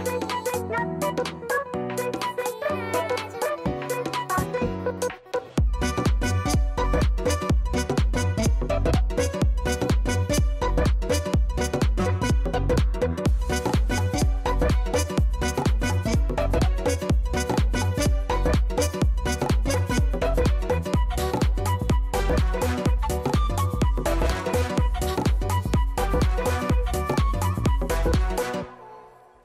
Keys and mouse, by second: 1.3 click, 1.7 click, 2.5 KP_2, 4.3 click, 4.6 click, 5.3 KP_1, 6.6 click, 7.6 click, 7.8 click, 10.1 click, 12.7 click, 13.6 click, 14.3 KP_1, 14.5 KP_0, 14.6 Return, 20.6 click, 21.0 click, 21.6 click, 23.1 click, 24.4 right click, 24.6 alt+click, 25.5 alt+middle click, 25.7 alt+right click, 26.2 alt+click, 27.3 right click, 27.4 alt+click, 28.2 alt+middle click, 28.6 alt+click, 28.8 alt+middle click, 29.1 alt+click, 29.3 alt+middle click.